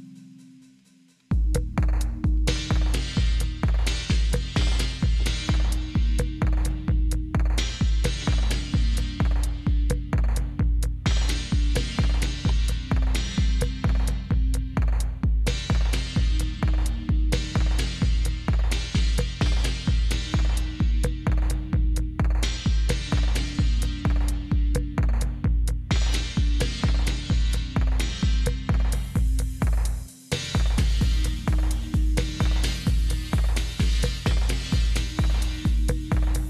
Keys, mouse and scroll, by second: 2.2 Right.